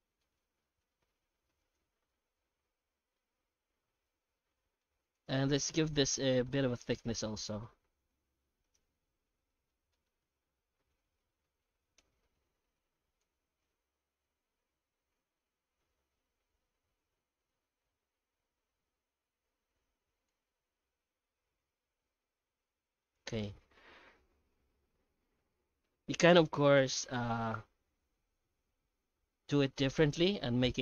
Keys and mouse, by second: 2.1 Tab, 2.7 middle click, 3.3 alt+a, 3.8-4.8 middle drag, 5.1 right click, 5.4 Tab, 6.1 middle click, 6.6 Tab, 7.2 right click, 8.1 h, 8.6 right click, 9.1 Tab, 9.5 middle click, 9.9 shift+middle click, 10.5 ctrl+f, 11.9 F9, 20.7 Tab, 21.5 alt+h, 22.0 alt+a, 22.2 middle click, 23.3 right click, 23.9 Tab, 24.4 Tab.